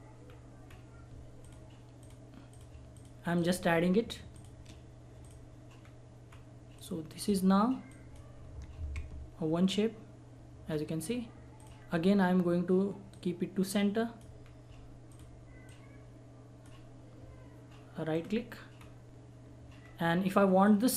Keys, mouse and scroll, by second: 0.2 scroll down 1, 1.4 shift+click, 3.7-4.3 shift+scroll down 1, 4.3 shift+click, 5.8 scroll down 1, 6.7 scroll up 1, 6.8 click, 10.7 scroll down 1, 11.6 click, 11.8-13.1 scroll up 1, 13.1 click, 14.4 scroll down 1, 15.1 click, 18.1 right click, 18.7 scroll up 1, 20.6 click.